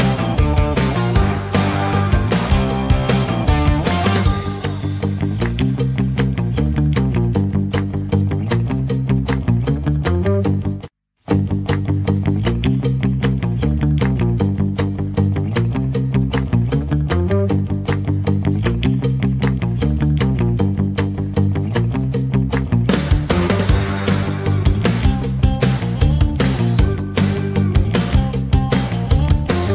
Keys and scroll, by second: 11.0 Page_Down.